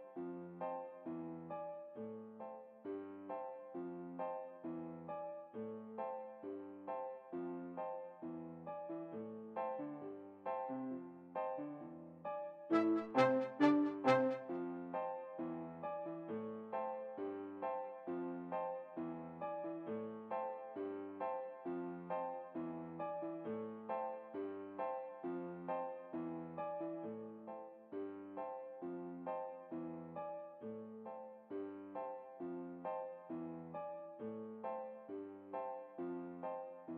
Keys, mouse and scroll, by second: 0.2 shift+a, 1.9 shift+a, 2.5 shift+s, 5.5 Tab, 6.1-7.3 middle drag, 7.3 shift+a, 11.8-13.5 drag, 12.4-13.7 middle drag, 13.7-15.2 drag, 14.3 middle click, 14.6-16.1 middle drag, 18.2-19.7 drag, 22.1 Tab, 23.5-25.0 drag, 25.7-27.2 middle drag, 27.7 Tab, 28.7-30.6 right drag, 30.7 ctrl+p, 36.4-36.9 right drag.